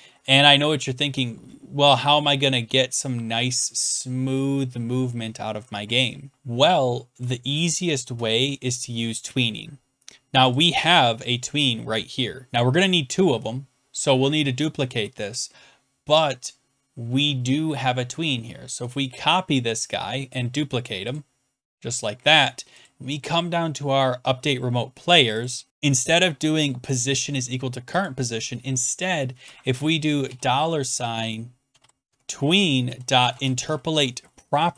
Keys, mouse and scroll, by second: 0.6 Left, 0.6 Left, 0.6 Left, 1.1 Right, 1.1 Up, 1.8-2.6 Down, 2.6-3.5 Left, 3.7 Right, 4.2 Right, 4.3 Right, 4.5-5.2 Down, 5.2 Left, 6.2 Right, 6.3-7.1 Down, 7.8-8.3 Up, 10.5 Up, 10.5-15.6 drag, 18.9-21.1 middle drag, 21.1-22.9 drag, 22.9 right click, 23.1-23.9 scroll down 2, 25.4 click, 25.6 scroll down 6, 26.0 click, 28.0 click, 29.3 Return, 30.2 typing, 31.4-34.7 typing.